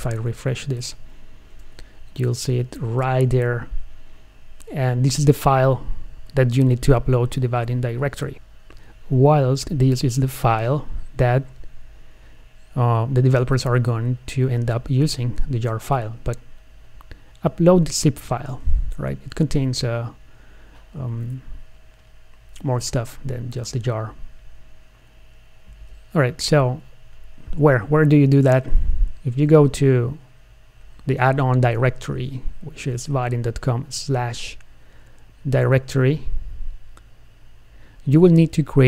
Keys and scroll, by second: 0.1 F5.